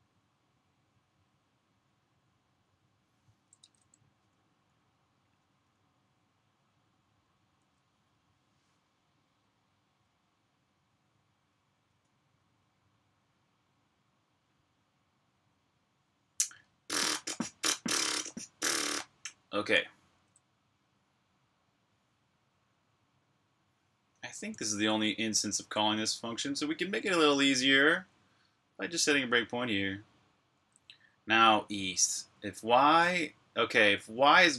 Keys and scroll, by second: 3.4 super+Tab.